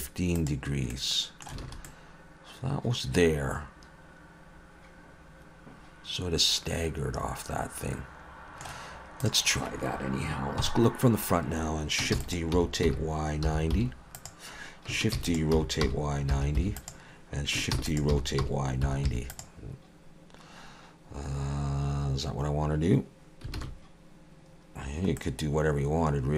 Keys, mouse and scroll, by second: 0.9 middle click, 1.7 alt+a, 1.9 middle click, 9.2 click, 10.6 KP_1, 12.2 shift+d, 12.5 r, 15.2 shift+d, 15.6 r, 17.8 shift+d, 18.1 r, 23.6 alt+a, 24.8-25.2 scroll down 1, 25.2 middle click.